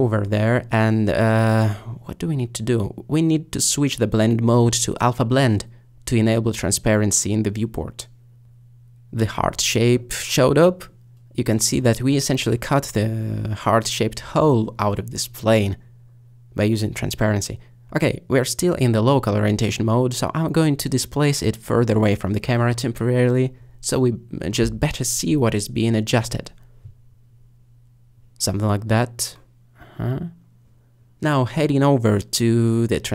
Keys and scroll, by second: 18.8 g, 19.5 z, 25.6 g, 25.8 z.